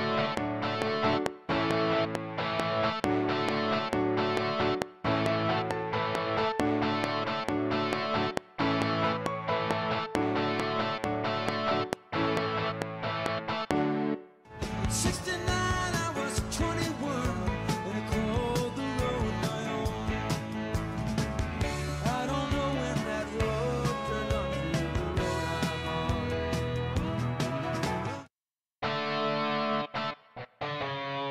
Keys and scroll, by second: 14.1 space, 27.9 space.